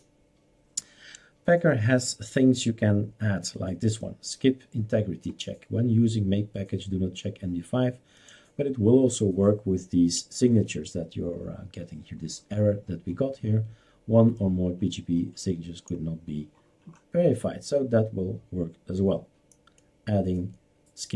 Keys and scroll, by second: 0.0-1.0 typing.